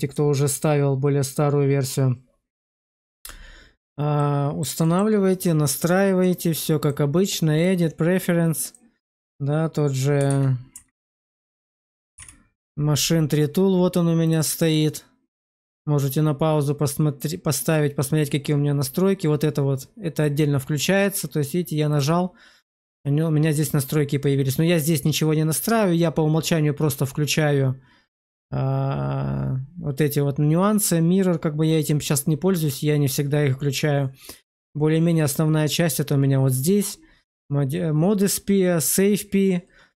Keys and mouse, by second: 4.1 middle click, 4.7 shift+middle click, 6.2 click, 6.7 click.